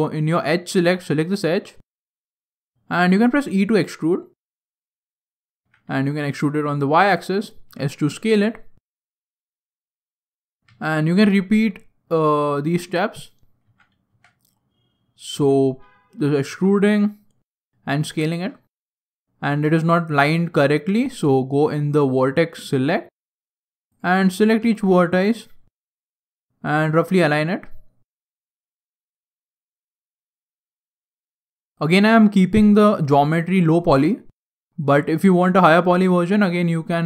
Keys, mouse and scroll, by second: 0.2 click, 1.1 right click, 2.9 e, 7.6 s, 8.9 e, 10.6 s, 13.5 e, 16.4 s, 17.8-18.2 scroll down 6, 18.2 shift+middle click, 18.6 scroll up 2, 18.9-19.2 scroll down 2, 19.2 scroll down 1, 19.3 scroll down 1, 19.7 shift+middle click, 21.7 click, 22.5 right click, 24.5 g, 25.6 shift+middle click, 26.6 right click, 26.9 g, 28.9 scroll down 3, 29.0 scroll up 1, 29.3 shift+middle click, 30.1 right click, 30.3 g, 31.7 right click, 31.9 g, 33.7 scroll down 3, 33.8-34.5 scroll down 3, 34.1 shift+middle click, 34.3 shift+scroll up 1, 34.5 scroll down 1, 35.1 shift+middle click, 35.9 right click, 36.0 g.